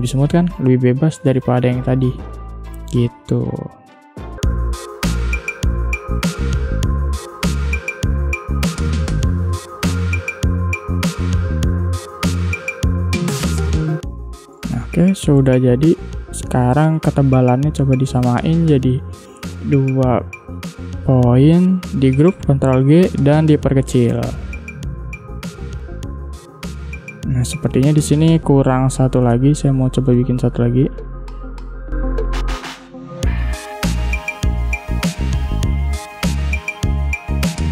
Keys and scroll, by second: 2.0 ctrl+z, 4.3 space, 6.5 space, 8.8 space, 9.9 space, 12.3 space, 14.5 space, 18.9 2, 19.0 Return, 22.0 ctrl+g, 23.0 v, 25.8 space.